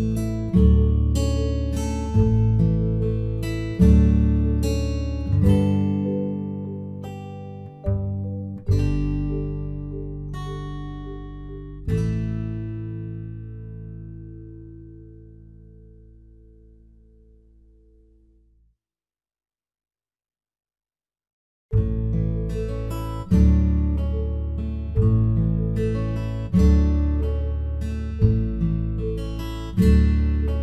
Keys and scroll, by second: 0.6 ctrl+0, 9.9 ctrl+t.